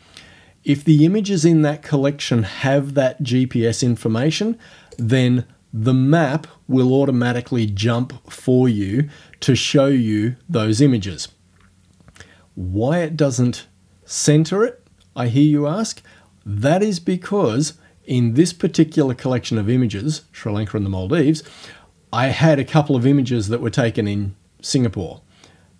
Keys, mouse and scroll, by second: 5.0 click, 19.0 click, 21.5 click.